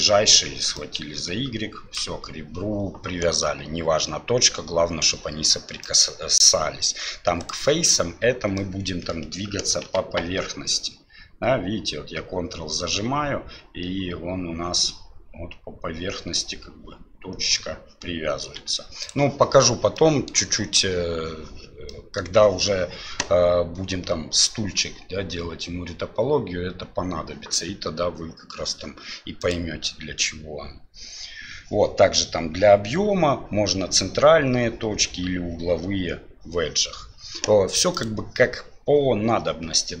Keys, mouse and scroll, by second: 0.7-2.0 ctrl+drag, 5.9-8.0 drag, 8.7 middle click, 9.8 g, 20.0 middle click, 21.9-22.2 middle drag, 29.4-35.5 drag, 38.0-40.0 drag.